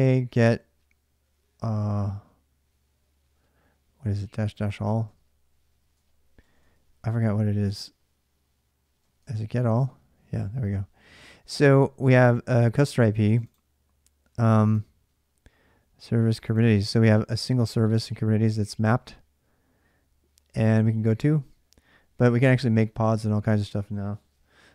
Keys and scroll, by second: 0.0-0.3 typing, 4.0-4.6 typing, 4.9 Return, 5.6-6.9 typing, 8.4-9.3 typing.